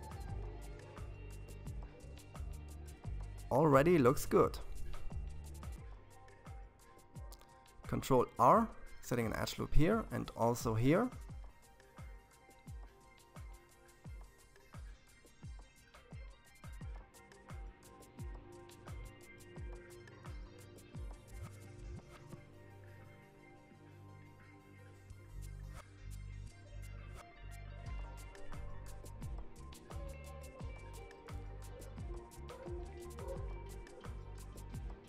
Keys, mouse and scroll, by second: 3.8 ctrl+r, 6.2-9.1 middle drag, 9.1 ctrl+r, 12.0-15.0 middle drag, 18.8 KP_3, 25.4-28.2 middle drag, 28.2 KP_3, 30.0 shift+z, 31.8 alt+a, 33.8 c.